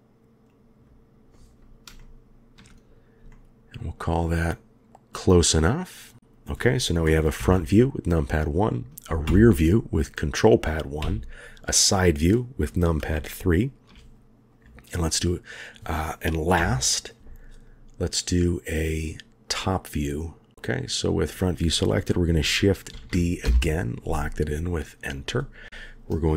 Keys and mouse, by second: 2.0-2.5 shift+middle drag, 3.3-3.7 shift+middle drag, 7.4 KP_1, 9.2 ctrl+KP_1, 11.0 KP_3, 13.1-13.8 shift+middle drag, 16.6 KP_1, 18.7 click, 20.8 click, 22.9 shift+d, 25.1-26.3 drag.